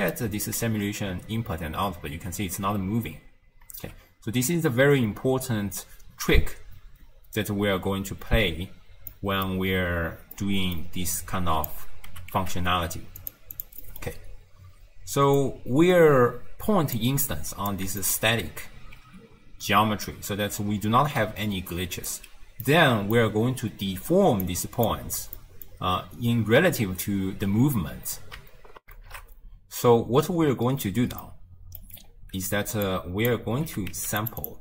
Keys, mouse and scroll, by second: 0.8 shift+space, 2.9 space, 3.8 shift+space, 9.1 middle click, 9.7-10.4 scroll down 5, 10.4 middle click, 11.2 click, 12.1 g, 13.6 click, 13.9 middle click, 14.1-15.1 scroll up 1, 15.1-15.4 scroll up 2, 15.4 click, 17.3 click, 18.1 alt+shift+click, 19.0 space, 20.2 space, 20.7 shift+space, 21.2 d, 21.8-22.2 right drag, 22.2 d, 22.7-24.5 middle drag, 24.5 click, 25.4 middle click, 25.9-26.8 scroll down 1, 26.8-28.8 scroll down 1, 28.8 n, 28.9 ctrl+alt+shift+q, 31.3 middle click, 32.1-32.8 scroll down 2, 32.9 click, 33.7 g, 34.5 click.